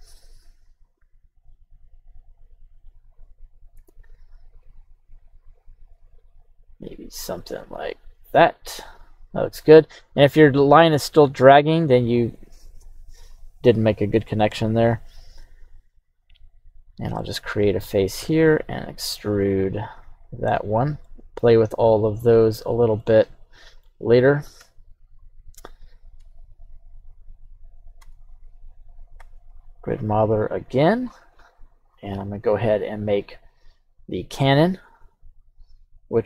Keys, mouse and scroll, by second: 13.3 click, 14.2-17.0 drag, 17.2 middle click, 18.7 e, 20.6 click, 21.0 middle click, 23.0 middle click, 24.0-24.6 scroll down 2, 24.6 KP_3, 25.1-26.1 scroll up 3, 26.2 Tab, 26.7 right click, 28.0 Tab, 28.3 right click, 29.1 q.